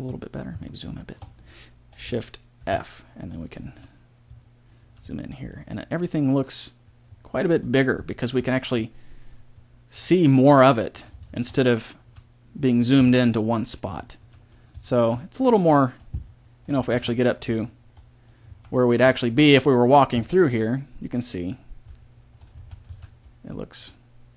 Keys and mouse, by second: 2.5 shift+f.